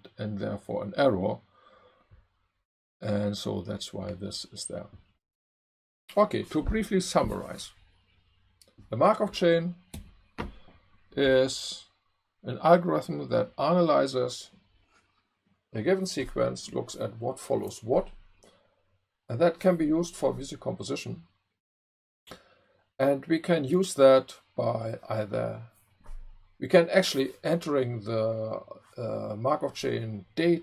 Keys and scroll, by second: 9.9 Left.